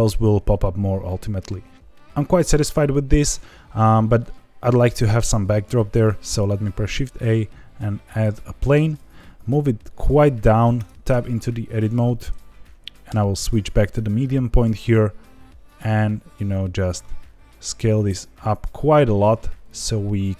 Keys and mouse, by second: 6.6 shift+a, 8.9 g, 10.0 click, 10.7 Tab, 11.0 s, 11.9 Escape, 13.0 ., 14.6 s, 19.6 click.